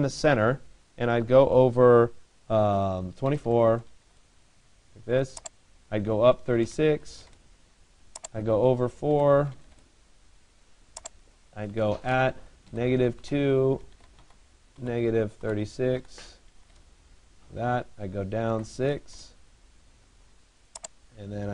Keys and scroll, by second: 3.0 2.